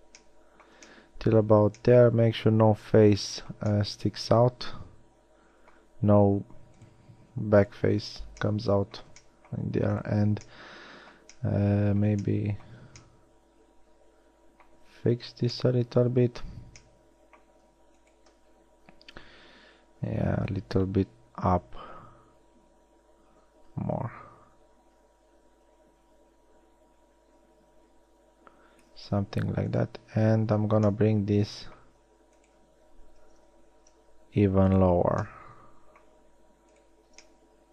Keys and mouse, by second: 1.3-2.1 middle drag, 4.1-4.9 middle drag, 8.5-10.0 middle drag, 14.7 middle click, 31.0-32.0 alt+middle drag, 33.8 a.